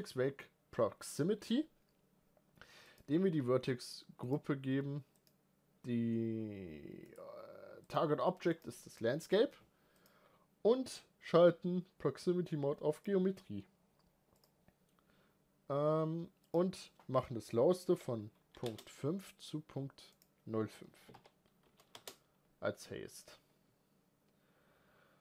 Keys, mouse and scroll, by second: 13.0 click, 18.4-25.2 drag.